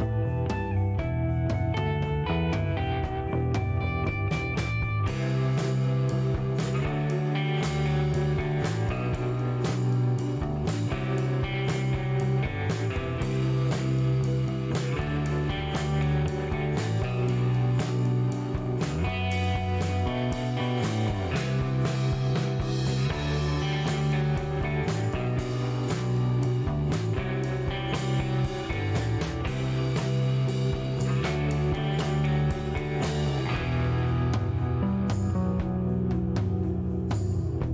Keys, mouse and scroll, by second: 0.0 shift+scroll up 1, 0.3 shift+middle click, 0.9 shift+right click, 3.8 click, 5.4 click, 6.4 click, 14.0 click, 15.0 click, 17.1 click, 18.2 KP_Subtract, 18.6 KP_2, 18.8 KP_5, 24.3 KP_Enter, 28.1 middle click, 30.7 click, 34.1 click, 36.9 KP_5, 37.0 KP_0.